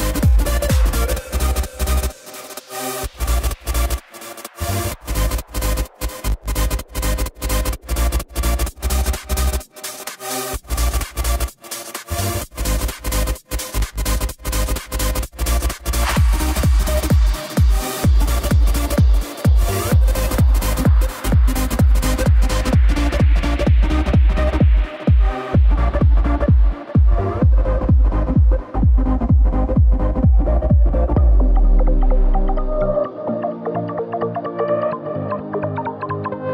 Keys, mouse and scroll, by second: 0.4 KP_7, 1.2-2.3 scroll down 4, 4.5 click, 5.4-9.7 drag, 10.7 Tab, 11.5 Tab, 13.7 click, 14.8 g, 22.1-24.6 drag, 24.6 scroll up 2, 26.0 g, 29.3 KP_0, 30.8 click, 32.0 z.